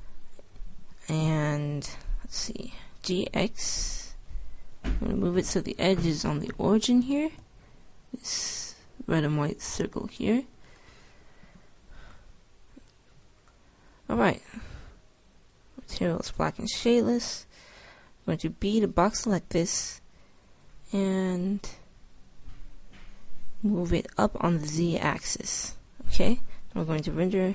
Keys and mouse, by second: 3.0-5.0 middle drag, 3.0 g, 6.2 click, 6.8-7.8 middle drag, 7.6 g, 12.5-15.9 middle drag, 17.6 middle click, 18.6 b.